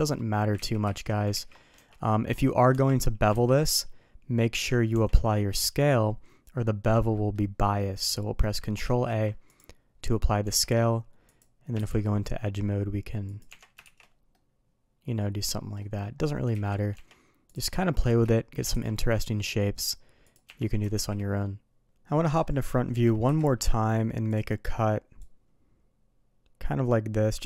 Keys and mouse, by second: 0.6 ctrl+z, 1.7 Tab, 2.7 Tab, 3.3 ctrl+b, 4.9 Tab, 5.6 n, 6.6 middle drag, 7.1 middle click, 7.6 middle click, 8.8 ctrl+a, 10.4 Tab, 11.8 ctrl+b, 13.5 Tab, 13.8 shift+2, 14.3-15.4 middle drag, 15.8 middle drag, 16.5 ctrl+z, 16.9 Tab, 17.5 click, 18.0 shift+click, 18.7 ctrl+b, 20.4 Tab, 20.9 shift+2, 21.4-21.8 middle drag, 22.1 middle click, 23.2 KP_1, 25.2-27.4 drag.